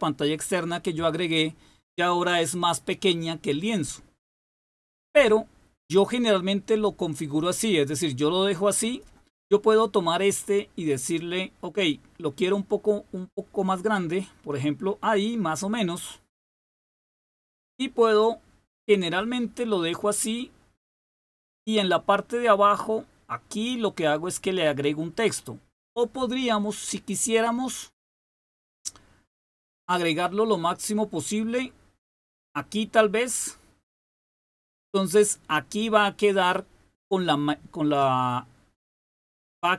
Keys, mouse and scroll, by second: 7.9 click, 12.8-16.8 drag, 29.3-34.0 drag.